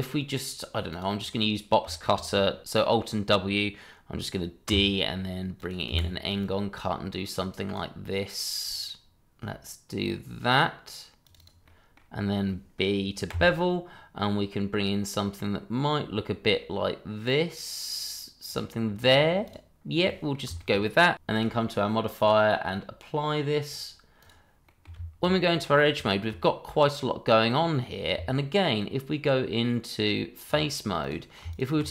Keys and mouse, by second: 0.9 click, 1.9 shift+middle click, 2.8 alt+w, 4.7 d, 6.3-6.8 drag, 7.1 drag, 7.6 drag, 7.8 drag, 8.8 click, 11.2 click, 11.4 click, 11.6-11.9 middle drag, 13.3 b, 18.4 click, 19.4 click, 20.0 middle drag, 20.5 shift+middle drag, 21.3 click, 22.1 click, 23.6-24.3 drag, 24.6 middle drag, 24.9 Tab, 26.1 shift+middle click, 26.4-27.4 middle drag, 27.6 middle drag, 28.1 Tab, 31.0 click, 31.5 shift+click.